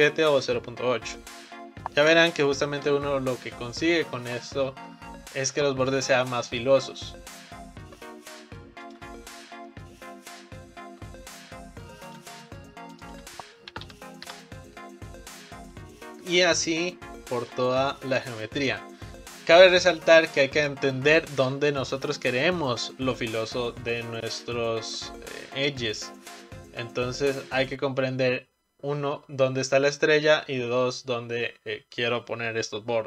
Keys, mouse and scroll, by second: 3.9-7.0 right drag, 13.0-16.0 drag, 16.4 click, 17.4 shift+click, 25.8-28.9 right drag.